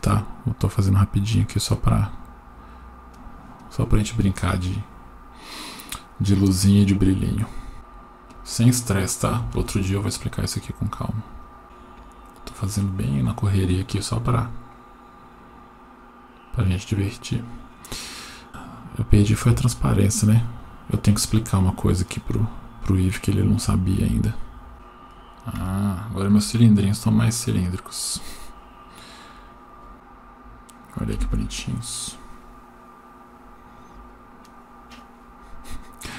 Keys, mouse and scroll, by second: 1.4 click, 1.8-3.1 scroll down 3, 3.1-3.5 drag, 7.7 g, 9.5 shift+a, 11.6 g, 12.3-12.6 drag, 18.8-20.1 right drag, 20.1 click, 20.6-21.8 scroll down 6, 22.1-24.7 drag, 24.7 Down, 25.6 Tab, 27.2-28.4 scroll up 1, 28.4 click, 29.3 click, 33.6 F12.